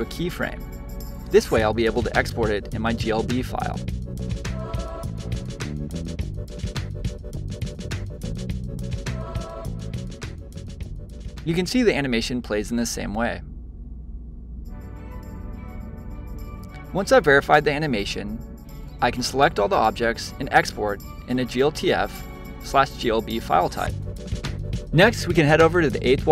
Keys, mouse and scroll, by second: 10.5 click, 10.9 middle click, 11.5 space, 14.8 space, 15.5 shift+Left, 16.1-17.1 middle drag, 17.1 click, 19.1-22.2 drag.